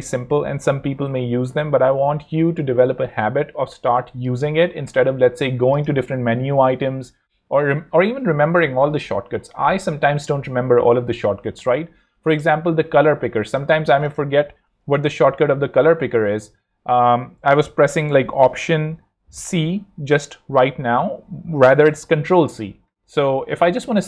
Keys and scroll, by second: 11.4 Escape, 14.9 alt+c, 15.6 ctrl+alt+c, 23.1 ⟲.